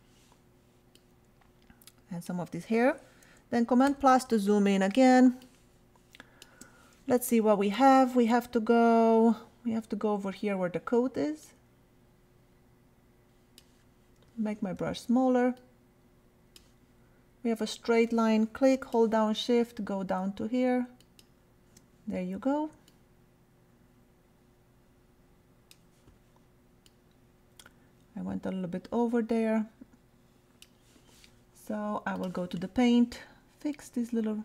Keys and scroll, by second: 3.9 super+=, 5.1 super+space, 14.3 [.